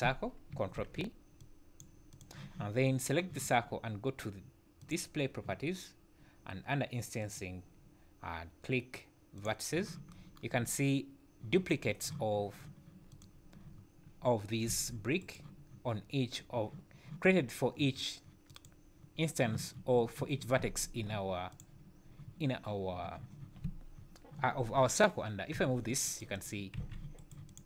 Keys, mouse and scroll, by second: 0.8 ctrl+p, 2.1 click, 4.8 click, 7.2 click, 9.4 click, 13.1 click, 14.7 g, 18.5 click, 20.6 Tab, 21.5 click, 25.6 g, 26.3 click, 26.8 g, 27.5 click.